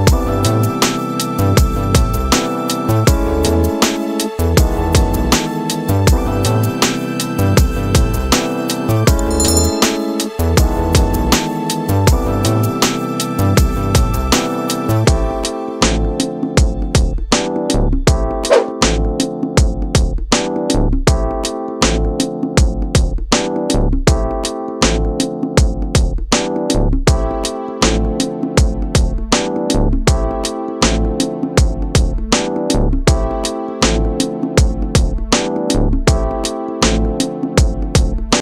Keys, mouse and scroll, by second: 8.4 ctrl+=, 8.8 ctrl+=, 9.1 ctrl+=, 11.2 space, 13.6 double click, 14.9 ctrl+-, 15.3 ctrl+-.